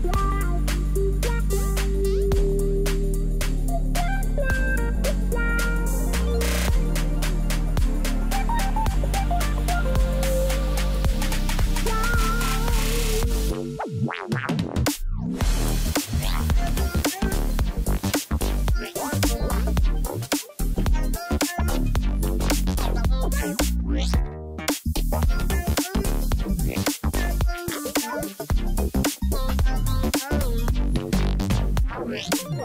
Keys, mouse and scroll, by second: 4.9 ctrl+click, 16.8 shift+click, 17.6 shift+click, 18.2 ctrl+t, 26.4 ctrl+g, 30.2 ctrl+click.